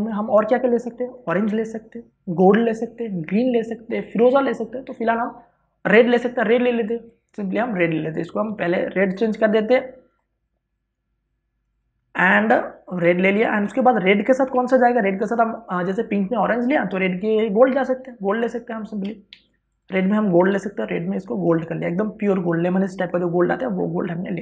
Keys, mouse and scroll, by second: 9.1 w, 9.9 click, 15.1 ctrl+d, 20.0 v, 20.4 click, 21.2 w, 21.4 click.